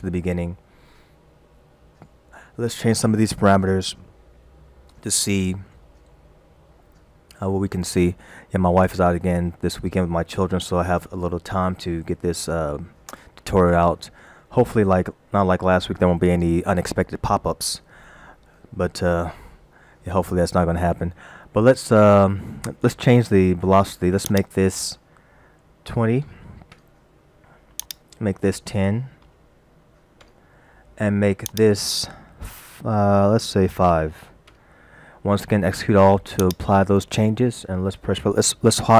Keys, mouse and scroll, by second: 24.3 click, 31.5 click, 36.4 click.